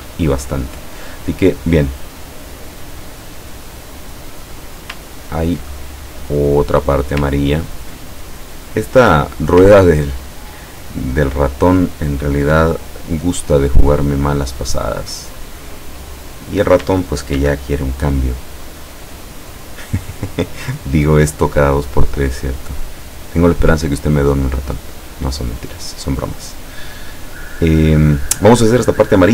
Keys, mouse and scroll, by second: 5.1 ctrl+scroll down 2, 5.9 ctrl+click, 7.5-7.9 ctrl+scroll down 2, 8.2 ctrl+click, 8.7 click, 10.0 ctrl+scroll down 2, 15.4 click, 16.2 click, 17.4 ctrl+d, 18.9-22.2 drag, 22.3 click, 23.2-24.3 drag, 24.8 click.